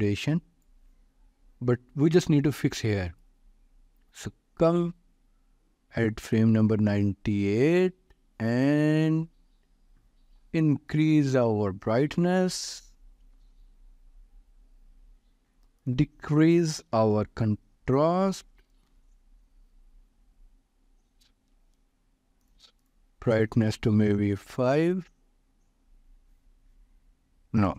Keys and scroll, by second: 12.7 ., 13.0 5, 13.4 Return, 18.0-19.0 typing, 24.3 Return.